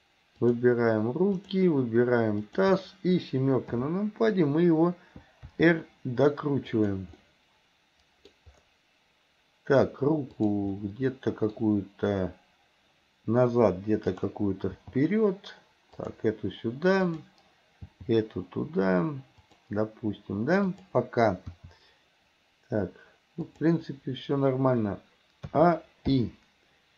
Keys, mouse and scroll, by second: 0.5 shift+click, 1.4 shift+click, 2.5 shift+click, 3.7 KP_7, 5.5 r, 7.2-8.3 middle drag, 10.4 click, 10.8 middle click, 14.1 click, 14.7 g, 17.1 click, 21.6 r, 25.5 a, 26.2 i.